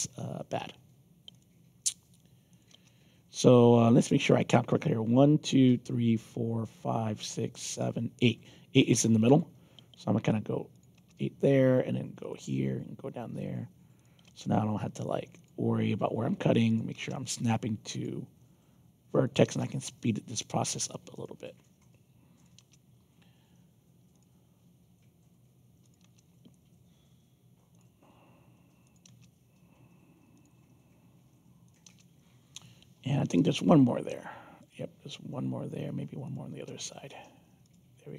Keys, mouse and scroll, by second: 1.3 click, 2.5 click, 2.7 Return, 9.2 click, 10.7 click, 10.9 Return, 12.2 click, 13.9 click, 14.2 Return, 15.3 click, 16.6 click, 16.9 Return, 17.9 click, 19.2 click, 19.4 Return, 21.1 click, 22.3 click, 22.5 Return, 24.1 click, 25.8 click, 26.0 Return, 27.7 click, 28.8 click, 29.0 Return, 30.3 click, 31.6 click, 31.8 Return, 34.5 click, 36.2 click, 36.5 Return, 37.6 click.